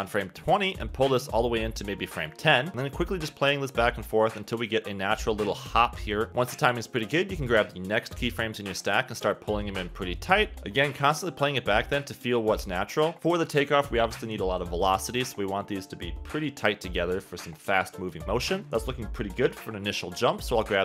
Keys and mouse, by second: 0.0-1.1 typing, 0.7 click, 1.5 click, 3.2 space, 3.8 space, 4.0 click, 4.2 space, 4.9 click, 5.5 space, 5.7 click, 7.4 click, 11.9 click, 13.1 space, 13.2 space, 13.7 space, 14.2 click, 16.9 space, 17.2 space, 17.9 space, 18.5 space, 19.5 click, 19.8 space, 20.1 space, 20.5 click.